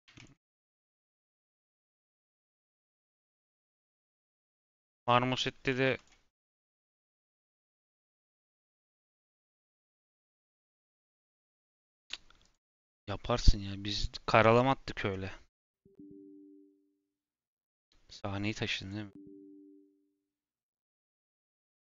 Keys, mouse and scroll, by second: 0.0 Tab, 0.1 click, 0.9 /, 1.6 click, 2.6 click, 3.0 scroll down 2, 4.6 scroll down 1.